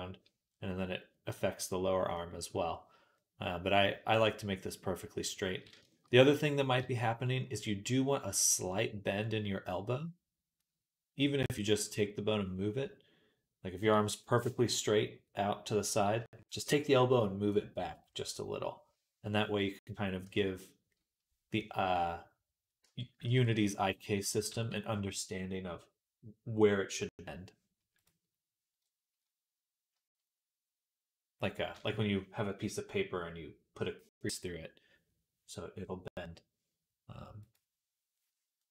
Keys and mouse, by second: 20.1 Tab, 23.2 ctrl+Tab, 24.4 ctrl+s, 37.7-38.7 drag.